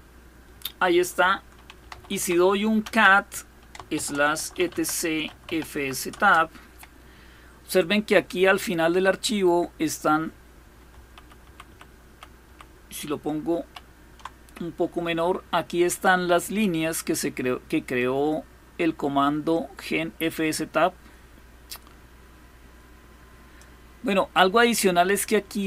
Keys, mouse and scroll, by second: 1.3-5.8 typing, 10.9 ctrl+-, 11.1 ctrl+-, 11.3 ctrl+-, 11.7 ctrl+-, 12.1 ctrl+-, 13.3 ctrl+-, 17.6-23.3 drag.